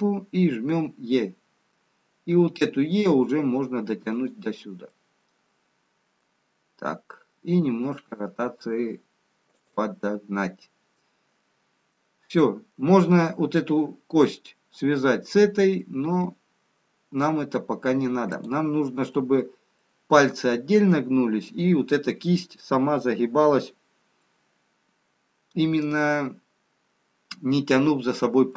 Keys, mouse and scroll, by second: 0.7 e, 7.2 middle click, 8.7 r, 10.3 middle click, 13.5 middle click, 15.9 middle click, 18.9 click, 18.9 scroll down 3, 20.4 middle click, 24.4-24.7 scroll up 3, 25.6 scroll down 1, 25.9 middle click, 27.3-28.5 scroll down 2.